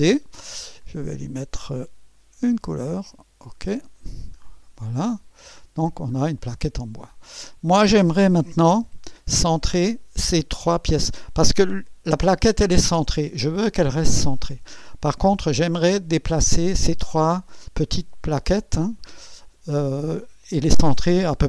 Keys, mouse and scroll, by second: 1.0 click, 2.4 click, 3.4 click, 4.5 click, 5.1 click, 6.2 scroll up 1, 6.5 right click, 7.5 click, 8.7 2.